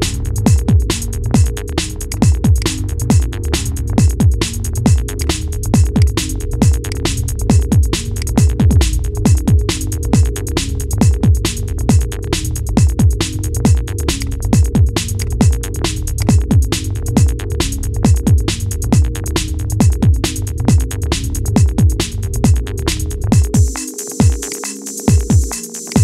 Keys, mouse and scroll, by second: 0.7-1.8 shift+middle drag, 1.8 click, 2.3 click, 4.1 click, 4.9-5.9 drag, 10.7 scroll up 2, 11.3-13.9 middle drag, 13.9 drag, 15.9 click, 17.3-20.3 middle drag, 22.6 click, 24.3 click, 25.6 click.